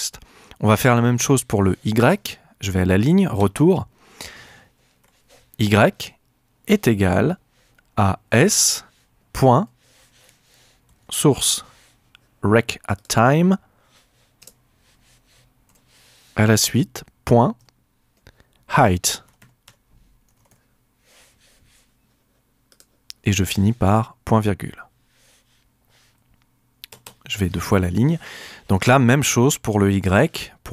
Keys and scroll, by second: 3.4 Return, 5.0 y, 6.6 =, 8.2-12.0 typing, 14.4 Return, 15.7 Right, 16.5 shift+Right, 17.6 shift+;, 19.0-21.0 typing, 24.7 ;, 26.9 Return.